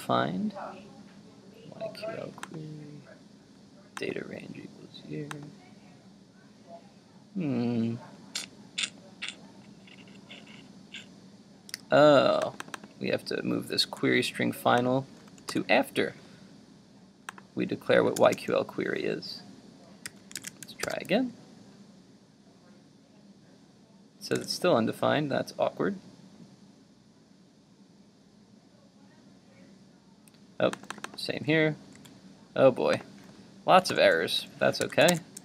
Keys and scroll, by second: 13.8 super+x, 15.6 super+v, 20.1 super+s, 20.5 super+Tab, 21.0 super+r, 24.4 super+Tab, 32.0 super+x, 34.1 super+v, 34.8 super+s, 35.2 super+Tab.